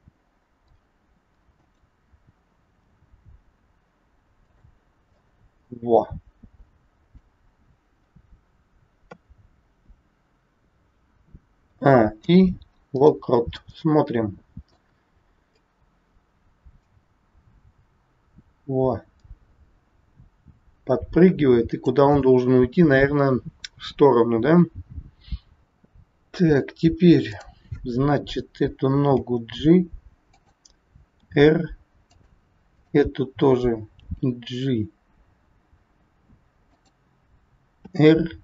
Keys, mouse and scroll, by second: 0.9 r, 2.7 g, 5.2 middle click, 8.9 KP_3, 11.5 a, 12.2 i, 13.5 middle click, 15.5 click, 23.7 scroll down 1, 25.6 middle click, 25.7-26.9 scroll up 2, 27.2 click, 29.1 g, 31.1 r, 32.6 click, 33.9 g.